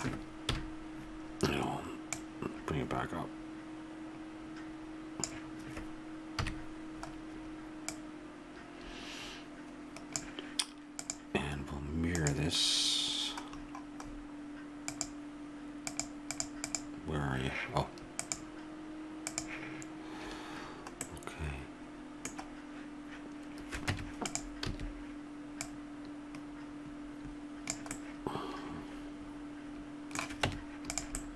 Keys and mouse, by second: 0.5 KP_1, 6.4 KP_3, 7.9-10.2 drag, 11.0-12.7 drag, 14.9-21.0 drag, 21.1 middle click, 23.9 Tab, 24.7 a, 25.6-27.6 drag, 30.5 Tab.